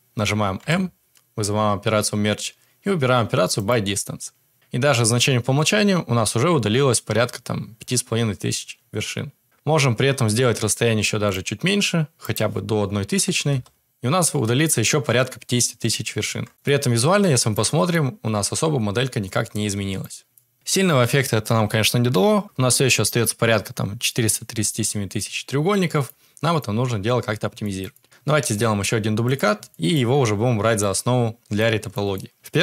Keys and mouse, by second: 0.5 m, 11.2-13.8 drag, 16.5 Tab, 16.6-16.9 middle drag, 17.3 middle drag, 17.8-19.9 middle drag, 20.3 middle drag, 25.9 Tab, 26.0-26.5 middle drag, 27.6 shift+middle drag, 27.9 middle click, 28.3 shift+d, 29.9 middle click, 30.8-31.8 middle drag, 32.0 shift+middle click.